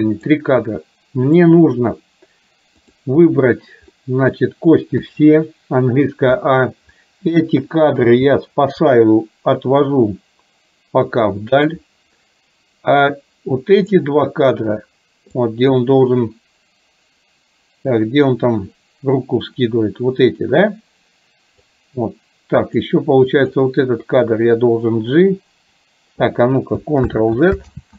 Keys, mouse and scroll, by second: 0.6-1.5 drag, 2.8 click, 4.0 middle click, 13.8 click, 15.5-21.7 drag, 22.7 click, 23.5 drag.